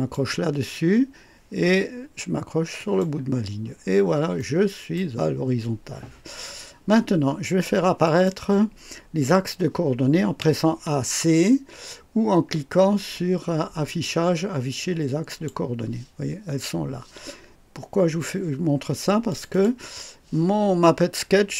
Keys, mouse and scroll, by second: 2.8 click, 3.7-4.0 scroll down 1, 4.4 right click, 8.0 click, 13.9 click, 15.3 click, 19.3 click.